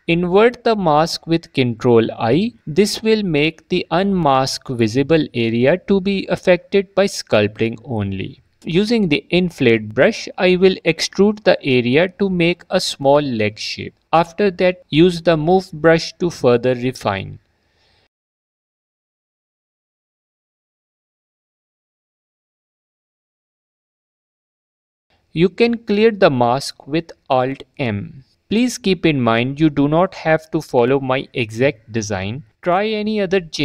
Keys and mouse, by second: 2.4 ctrl+i, 5.1 click, 6.0 f, 6.3 click, 7.5 click, 11.3 g, 11.5 f, 11.8 middle click, 12.5 f, 12.6 middle click, 12.8 middle click, 13.8 middle click, 14.6 click, 15.0 click, 15.2 click, 17.0 click, 17.9 click, 18.8 click, 20.3 alt+click, 22.8 ctrl+z, 24.0 click, 26.7 click, 29.4 alt+m, 31.1 Tab.